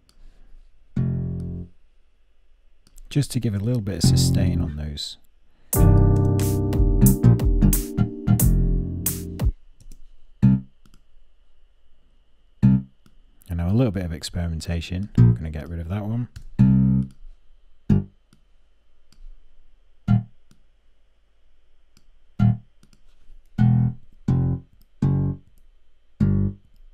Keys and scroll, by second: 23.6 Up, 24.3 alt+Up, 25.0 alt+Up, 26.2 alt+Up.